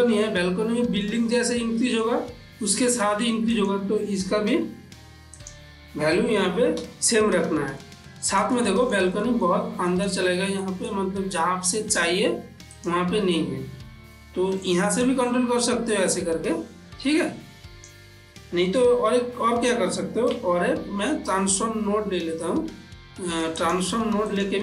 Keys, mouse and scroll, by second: 1.1 ctrl+middle click, 1.6-3.6 middle drag, 3.6 click, 5.4 click, 7.9-10.6 middle drag, 12.8 click, 15.1 click, 19.1 ctrl+z, 20.6 shift+a, 23.6 click.